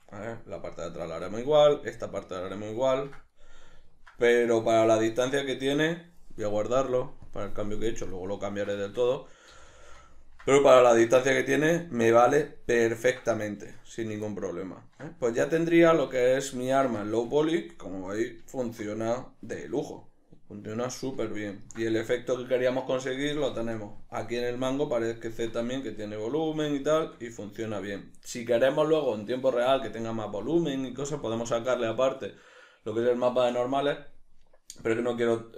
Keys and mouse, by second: 6.0 Tab, 7.0-8.8 drag, 8.8-35.5 ctrl+middle drag, 9.9 a.